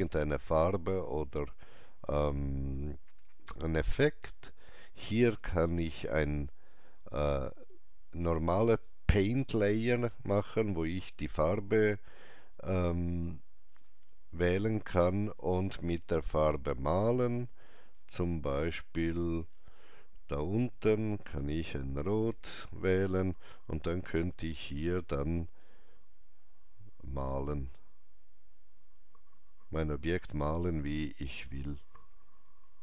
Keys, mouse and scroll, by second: 8.6 click, 13.0 click, 13.0 scroll down 1, 16.9 scroll down 1, 18.2-18.5 scroll up 1, 18.5-21.2 scroll down 1, 21.2 click, 22.3-32.8 drag.